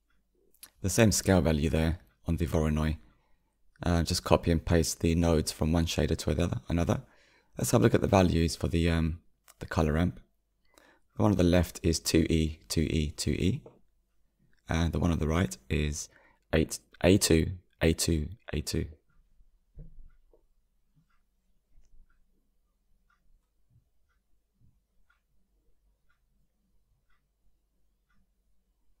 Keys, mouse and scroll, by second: 4.1 click, 10.7 click, 15.4-16.7 drag, 20.1 click, 21.6 scroll down 2, 27.9-29.0 drag.